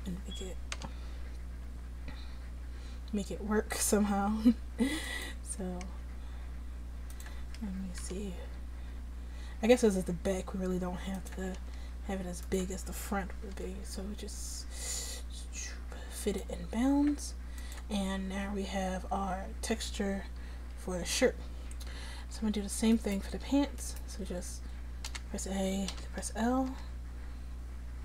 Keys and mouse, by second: 0.8 g, 5.9 s, 8.1 g, 11.8 s, 13.6 g, 18.4 a, 22.2 Tab, 24.2 Tab, 25.1 a, 26.0 l, 26.8 l.